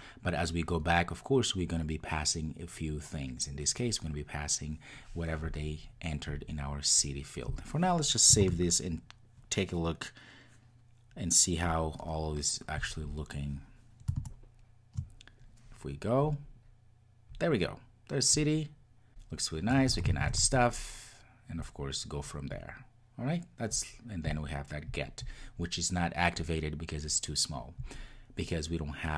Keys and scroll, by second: 8.5 super+s, 12.7 ctrl+r.